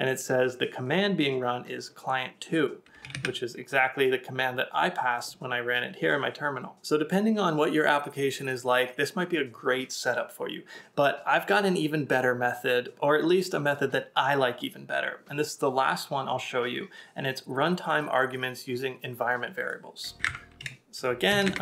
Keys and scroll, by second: 3.1 super+Tab.